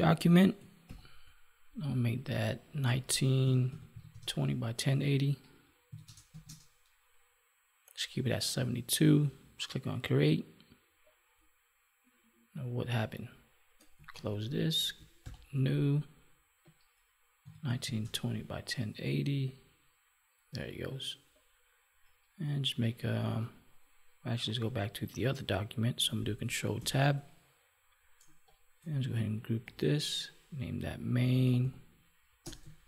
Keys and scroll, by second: 14.0 ctrl+w, 26.7 ctrl+Tab.